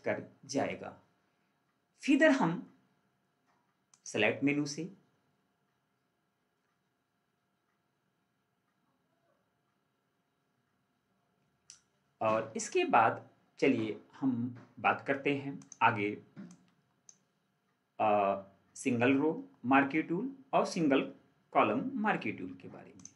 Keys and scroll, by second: 0.4 ctrl+4.